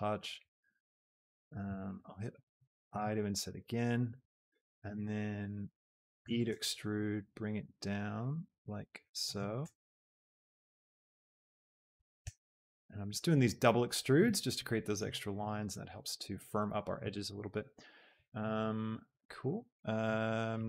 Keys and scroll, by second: 1.1 e, 1.9 Escape, 3.0 i, 6.3 e, 6.6 Escape, 9.6 Escape, 12.1 Escape, 19.5 alt+Tab.